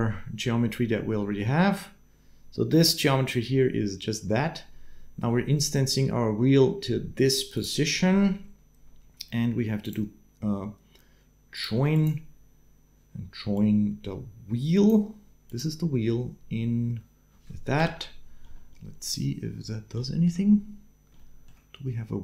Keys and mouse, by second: 7.3 middle click, 7.9 shift+a, 13.3-14.7 drag, 15.2 click, 17.6 shift+Left, 19.8 shift+middle click, 21.0 shift+middle click.